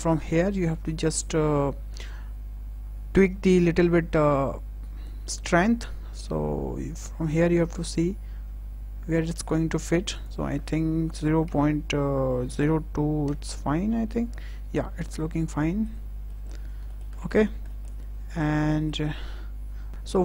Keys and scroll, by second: 11.0 KP_0, 11.3 KP_Decimal, 12.3 KP_0, 12.6 KP_2, 13.1 Return.